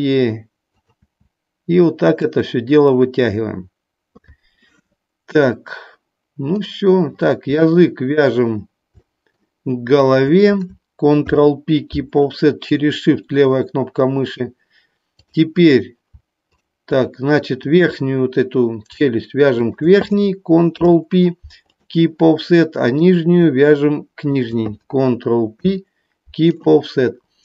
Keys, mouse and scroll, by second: 0.7 click, 1.0 e, 2.2 click, 6.4 click, 10.0 shift+click, 15.1 click, 16.4 shift+click, 17.5 click, 19.5 shift+click, 22.7 click, 24.2 shift+click.